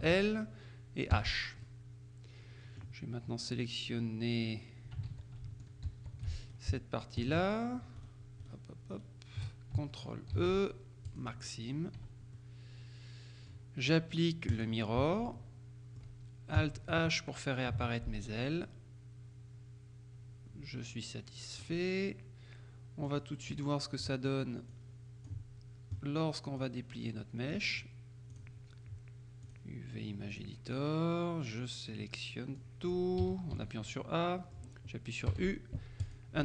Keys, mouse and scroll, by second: 0.1 ctrl+l, 1.2 h, 1.7 middle click, 1.9-3.4 drag, 5.2 ctrl+z, 6.0 shift+z, 6.5 shift+right click, 7.3 right click, 8.1-9.1 right drag, 10.4 ctrl+e, 11.1 click, 11.7-12.3 scroll down 1, 12.1 Tab, 12.5-14.1 drag, 14.6 click, 15.1 Tab, 15.4-16.6 drag, 17.8 alt+h, 18.7 click, 19.7-22.2 middle drag, 23.1 click, 24.8-25.8 drag, 26.7-28.1 drag, 28.4 click, 29.5 click, 30.4 click, 32.7 click, 33.3 a, 34.0-35.1 middle drag, 35.4 u, 36.1 click.